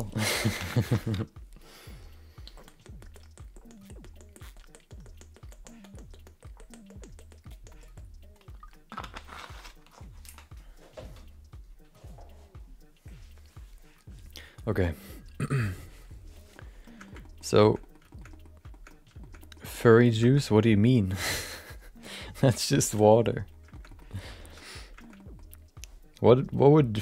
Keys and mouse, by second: 16.5 middle click, 17.0 shift+middle click, 17.2 middle click, 17.6 shift+middle click, 17.8 middle click, 18.1 shift+middle click, 18.3 middle click, 18.7 shift+middle click, 19.2 shift+middle click, 19.4 middle click, 19.7 shift+middle click, 19.9 middle click, 23.1 middle click, 23.7 shift+middle click, 23.9 middle click, 24.4 shift+middle click, 24.6 middle click, 25.0 shift+middle click, 25.1 middle click.